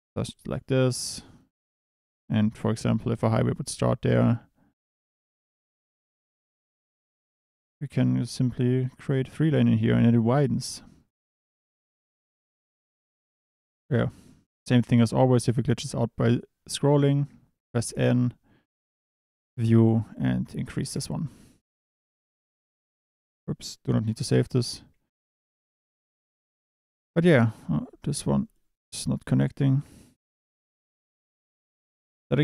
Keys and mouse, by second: 0.2-0.9 drag, 2.0 Tab, 2.5 KP_7, 3.7 e, 4.8 click, 5.1 e, 5.3 click, 6.5 2, 6.7 click, 8.2 click, 8.5 click, 9.7 Tab, 17.9 n, 19.7-20.9 drag, 20.8 KP_0, 22.3 ctrl+s, 25.2 n, 27.4 Tab, 27.7 click, 28.1 1, 28.4 click, 28.8 g, 29.6 click, 29.8 Tab, 31.3 click.